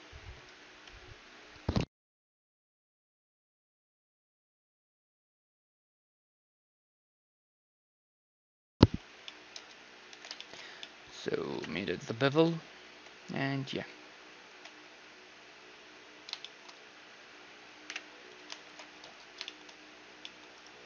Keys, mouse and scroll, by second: 0.4-2.3 drag, 6.6-8.1 middle drag, 8.6-14.8 middle drag, 10.1 t, 12.3 KP_1, 12.3 z, 13.7 t, 14.1 z, 14.5 t, 14.9 z, 15.2-18.4 middle drag, 17.1 z, 17.9 KP_Divide, 18.7 alt+h, 19.2 a, 19.5-20.8 middle drag, 20.6-20.8 drag, 20.6-20.8 right drag.